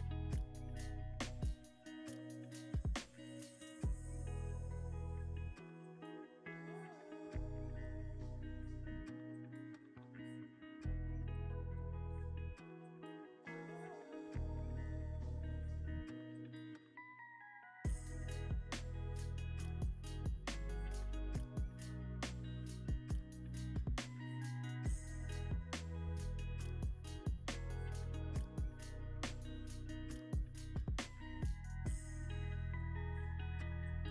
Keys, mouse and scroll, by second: 2.4 z, 9.1 double click, 12.9 z, 15.0 scroll, 15.0-15.3 scroll down 1, 15.3 scroll, 15.5-15.9 scroll up 1, 15.9 middle click, 17.1-19.4 scroll down 1, 22.9 Tab, 23.4 scroll, 23.4-23.8 scroll up 2, 23.8 middle click, 25.3 Tab, 26.1 middle click, 28.2-28.6 scroll down 1, 29.8 Tab, 30.3 middle click, 31.5 middle click.